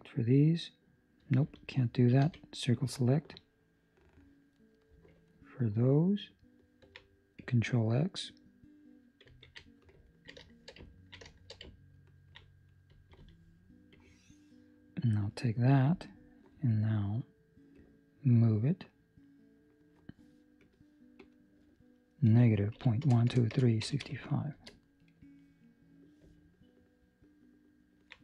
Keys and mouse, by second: 2.2 c, 5.2 ctrl+middle click, 9.2 ctrl+x, 10.0 ctrl+middle click, 10.4 shift+middle click, 10.8 ctrl+middle click, 11.2 shift+middle click, 11.9 ctrl+middle click, 12.8 Escape, 13.8 Escape, 13.8 click, 16.6 click, 17.7 click, 21.1 click, 23.4 KP_0, 25.9 middle click.